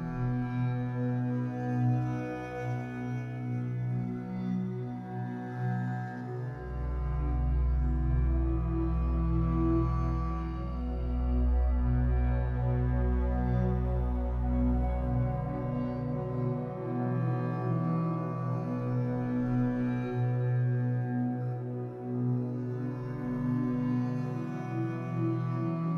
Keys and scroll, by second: 3.1 Escape, 7.8 Escape, 10.2 2, 11.1 alt+c, 16.4 Escape, 16.9 2, 17.9 w, 20.0 Escape, 20.5 3, 22.9 b.